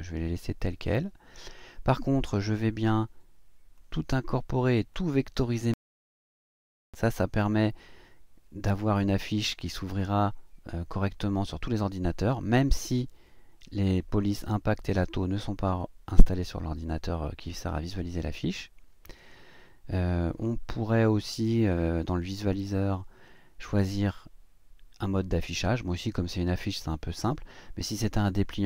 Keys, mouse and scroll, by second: 1.4 click, 3.7 click, 4.9 click, 19.2 click, 20.3 click.